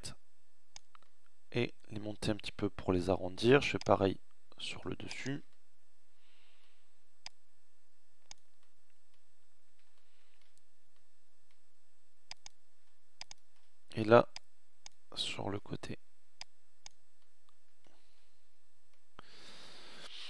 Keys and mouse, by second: 0.0-1.5 middle drag, 6.0-7.2 middle drag, 7.9 middle click, 17.1 Tab.